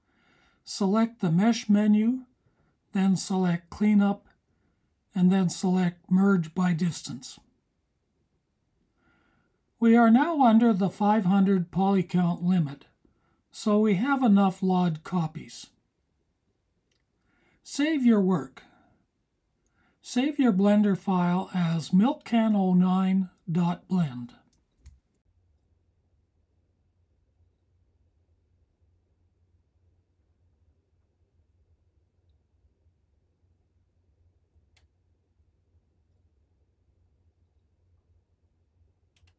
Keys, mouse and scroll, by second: 1.7-8.8 drag, 11.2 click, 14.5 F1, 15.8 click, 22.3-24.6 drag.